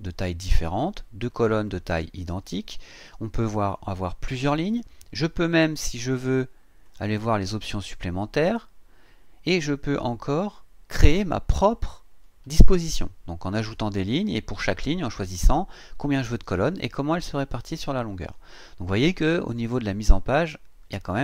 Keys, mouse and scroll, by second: 1.7 click, 3.6 click, 6.8 click, 9.1-9.5 scroll down 1, 12.7 scroll down 2, 16.5 click, 18.2 click, 18.8-19.4 scroll up 1.